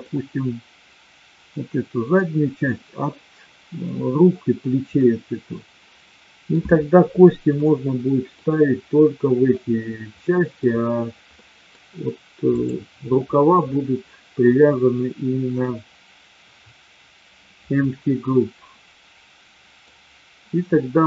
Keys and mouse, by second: 4.9-6.4 middle drag, 7.6-8.3 middle drag, 10.3 middle drag, 11.4 middle drag, 13.8-14.3 middle drag, 18.4-19.8 middle drag.